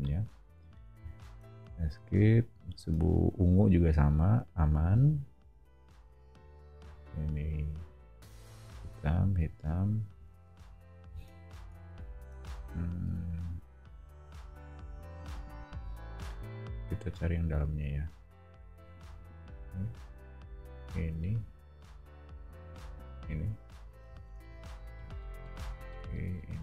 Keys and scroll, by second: 1.6 Escape, 10.1 o, 13.1 Escape, 24.0 o.